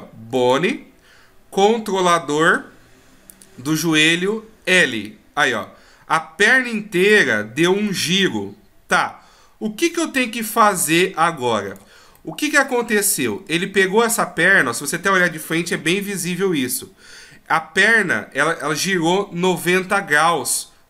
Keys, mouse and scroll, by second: 0.4 click, 7.8 d, 7.9 right click, 11.8 d, 12.2 middle click, 14.5 middle click, 15.7 KP_1.